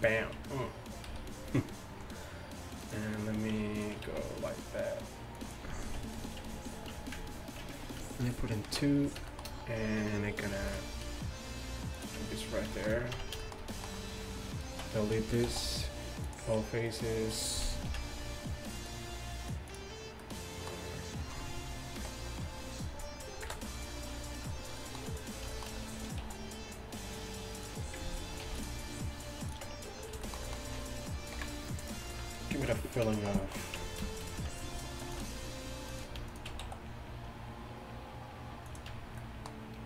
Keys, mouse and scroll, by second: 1.1 s, 3.8 right click, 4.1 s, 6.4 Tab, 7.0 Tab, 8.7 ctrl+2, 10.6 ctrl+r, 12.2 Tab, 13.2 Tab, 15.5 x, 16.9-18.7 middle drag, 17.9 ctrl+f, 20.3 middle click, 22.0 KP_7, 23.5 KP_Decimal, 26.3 s, 28.5 ctrl+r, 29.7 Tab, 31.4 KP_1, 33.8 Tab, 35.1 ctrl+r, 36.7 s, 39.0 Tab.